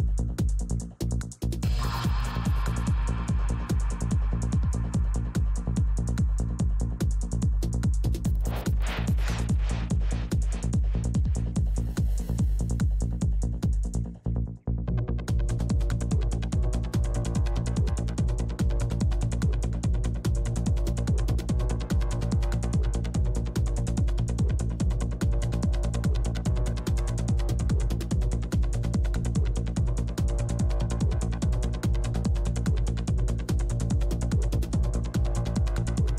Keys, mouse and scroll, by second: 0.4-2.9 drag, 0.4 f, 3.4 i, 3.4 f, 3.9-6.7 drag, 5.4 right click, 6.1 middle click, 6.7-8.9 typing, 7.1-8.4 drag, 8.1 middle click, 8.6-9.9 drag, 10.4 middle click, 10.6 f, 10.8-11.8 drag, 11.2-12.6 middle drag, 12.6 i, 12.6 f, 12.7 click, 12.8 middle click, 13.3 shift+f, 13.8-15.3 drag, 15.1 right click, 15.3 middle click, 15.3 f, 15.6 f, 16.1-17.9 drag, 16.1 right click, 17.5-19.8 middle drag, 19.4 click, 19.7-22.6 typing, 20.5-22.6 drag, 23.1 click, 24.9 f, 25.2 f, 25.5-26.8 drag, 25.8 f, 27.2-28.3 drag, 27.9-28.9 middle drag, 28.3-30.0 typing, 29.0-30.0 middle drag, 29.5-33.1 drag, 30.9-33.9 middle drag, 31.7 f, 34.1 f, 34.6 f, 34.9-36.1 drag.